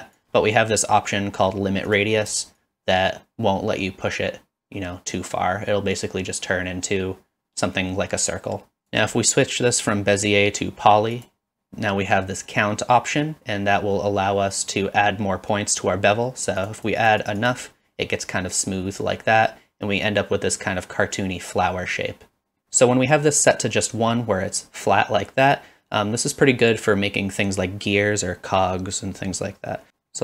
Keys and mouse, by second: 1.9 click, 2.7-8.9 shift+drag, 11.2 click, 16.7 click, 17.0 click.